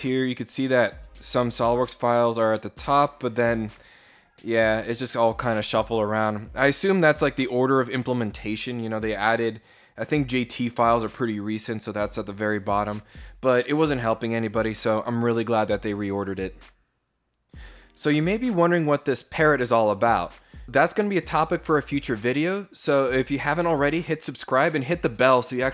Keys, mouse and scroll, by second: 2.8 click.